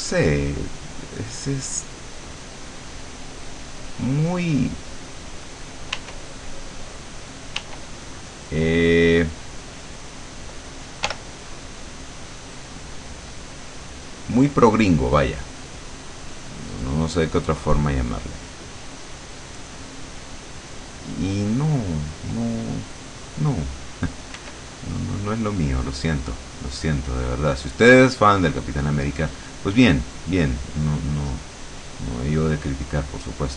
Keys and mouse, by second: 6.1 w, 7.7 w, 11.1 l, 12.9-15.4 drag, 15.9 click, 19.7 click, 24.5 r, 26.8 click, 29.3 click, 30.5 click, 32.1 click.